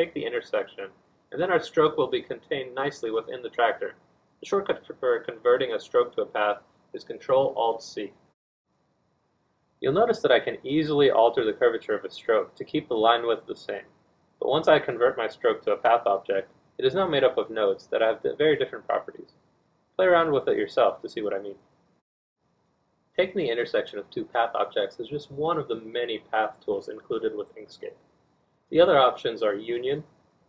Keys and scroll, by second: 11.5 z, 13.8 z, 15.6 z, 19.5 z, 22.2 1, 25.4 r, 28.6 z, 28.8 F1.